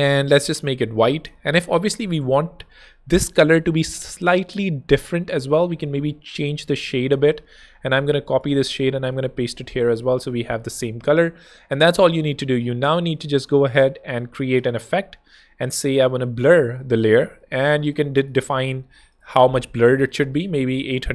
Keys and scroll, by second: 7.9 super+c, 9.2 super+v, 9.5 super+Tab, 10.0 Escape, 14.2 super+z, 18.5-19.3 typing, 19.8 Escape, 20.7 super+Escape.